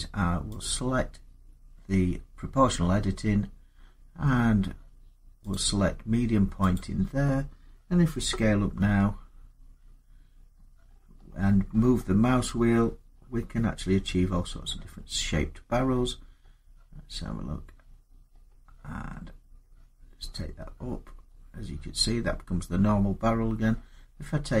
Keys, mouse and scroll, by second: 0.4 click, 5.3 click, 8.4 click, 8.6 s, 10.2 scroll up 4, 10.7-13.7 scroll down 27, 13.7-14.3 scroll down 1, 14.3 scroll down 1, 14.3-14.7 scroll down 2, 14.8-15.2 scroll up 8, 15.7-17.7 scroll down 3, 17.7-18.9 scroll down 4, 18.9-20.0 scroll down 8, 20.0-20.6 scroll down 2, 20.6-21.3 scroll, 21.8-22.5 scroll, 22.5 scroll, 23.1-23.6 scroll, 23.6 scroll down 11.